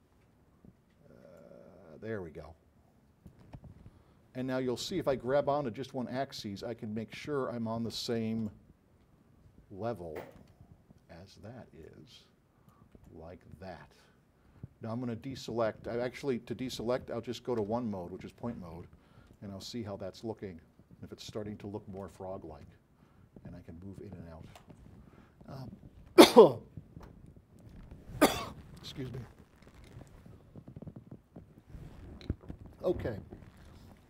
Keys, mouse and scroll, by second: 1.4 click, 1.6 click, 4.1 middle click, 4.3 middle click, 5.9-7.4 drag, 8.2 alt+click, 9.9 alt+click, 12.0 click, 13.2-15.5 alt+drag, 17.8 1, 19.4 alt+click, 22.6-22.9 scroll down 4, 23.2 middle click, 23.8 scroll down 2.